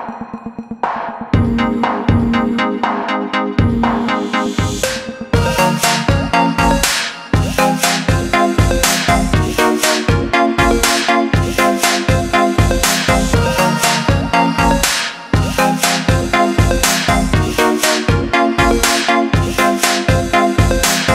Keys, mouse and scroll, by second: 1.1 click, 12.6 click, 20.9 click.